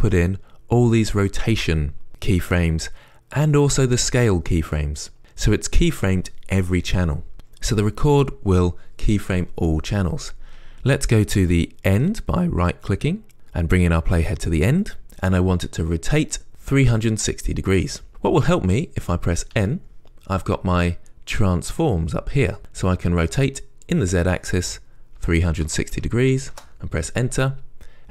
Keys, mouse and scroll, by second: 11.8-24.1 right drag, 24.1-28.1 drag, 26.9 Return.